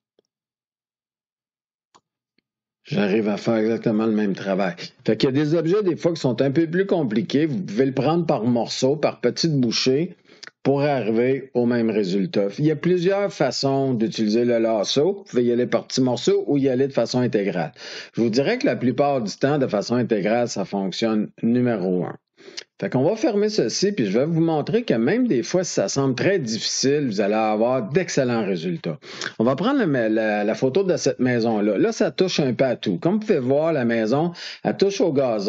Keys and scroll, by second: 2.9 F2, 11.0 ctrl+d.